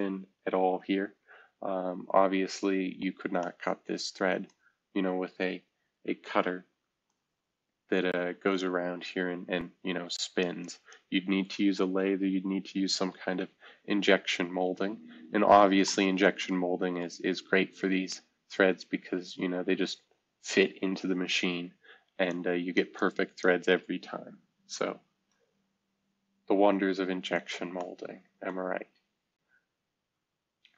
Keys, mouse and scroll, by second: 0.5 shift+F2, 1.2 F2, 2.4-2.8 scroll down 1, 2.8-3.6 scroll up 1, 6.4 F2, 12.9 shift+F2, 13.6 F2, 15.4 scroll down 2, 16.2-16.6 scroll down 1, 17.4-18.5 scroll up 1, 21.2 F2, 25.0 F2, 25.5 F2, 25.9 scroll down 1, 26.6 scroll down 1, 27.4-28.0 scroll up 1, 28.7-29.2 scroll down 1, 29.2-30.1 scroll up 1.